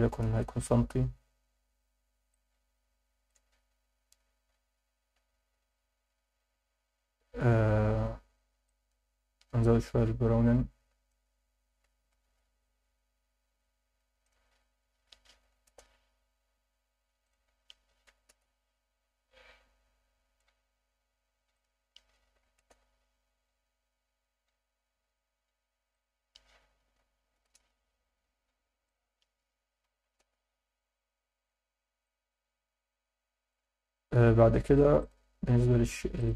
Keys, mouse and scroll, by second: 2.3-3.3 alt+middle drag, 3.8-4.2 scroll up 4, 5.2 scroll up 2, 8.7-11.1 drag, 14.2-15.7 drag, 17.2-18.4 drag, 21.5-22.7 drag, 25.9-27.5 drag, 28.9-30.3 drag, 32.0 click, 35.0 click, 36.2 click.